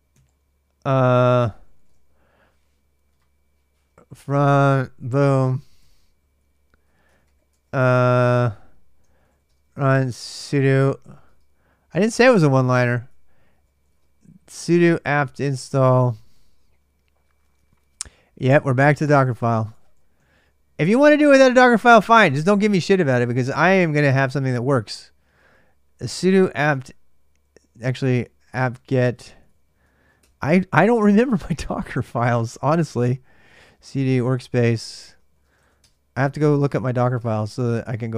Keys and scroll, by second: 1.0-2.0 typing, 4.0 ctrl+[, 4.1-7.5 typing, 8.7-11.0 typing, 12.3-16.4 typing, 18.8 ctrl+[, 18.9-36.8 typing, 22.5 ctrl+[, 23.6 ctrl+[, 37.0 Tab, 37.3 Return.